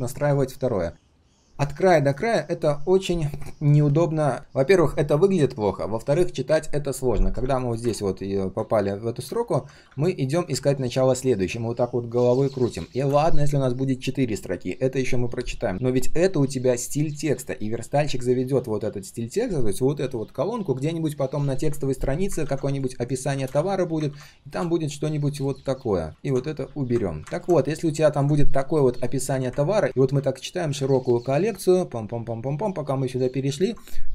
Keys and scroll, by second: 22.4 ctrl+c, 23.5 ctrl+v, 24.1 ctrl+v.